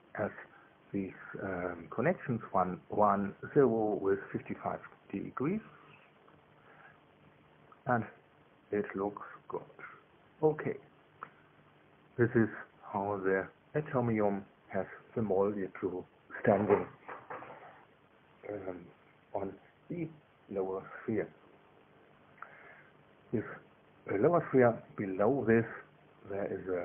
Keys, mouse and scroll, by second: 0.0 click, 1.4 KP_1, 1.9 Tab, 2.5 KP_1, 2.9 Tab, 3.3 KP_0, 4.5 KP_Enter, 5.8 click, 6.7 KP_5, 6.8 KP_5, 7.4 KP_Enter, 9.1 KP_2, 9.4 KP_1, 13.7 KP_1, 14.1 KP_3, 16.5-20.3 typing, 21.4 KP_1, 25.2 KP_2.